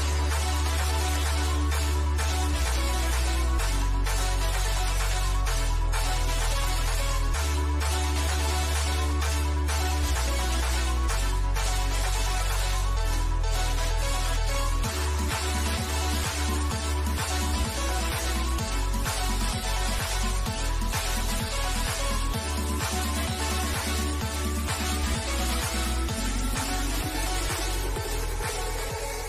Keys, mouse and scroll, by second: 0.3 ctrl+click, 1.1-3.0 shift+middle drag, 3.0 ctrl+click, 5.1-9.3 middle drag, 9.3 click, 9.9-12.2 shift+middle drag, 12.2 click, 14.2-14.9 scroll up 1, 15.0-17.8 middle drag, 18.5 click, 21.0-23.6 middle drag, 23.6 scroll up 1, 26.0 click, 27.2-28.7 middle drag, 28.7 click.